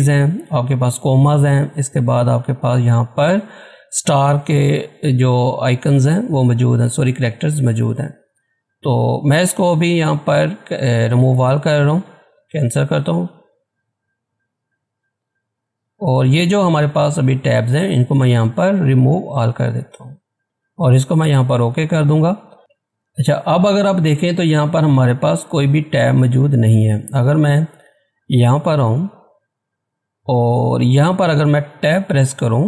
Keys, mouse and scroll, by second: 7.5-9.1 drag, 11.5 click, 19.4 click, 21.2 click, 22.5 scroll down 1, 22.7 scroll up 1, 23.0-23.4 scroll down 1, 23.4-25.1 scroll up 1, 27.6 click.